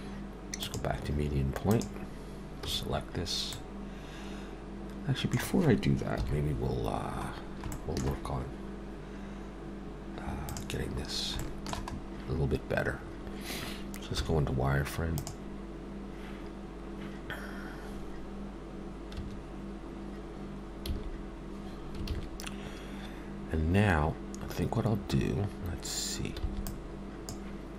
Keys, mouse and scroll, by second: 0.6 click, 2.7 a, 3.5 middle click, 6.2 KP_7, 7.3 scroll down 1, 7.7 shift+middle click, 10.5 click, 11.1 scroll up 1, 11.4 shift+middle click, 11.9 scroll up 2, 14.1 z, 19.2 1, 20.9 a, 26.4 b.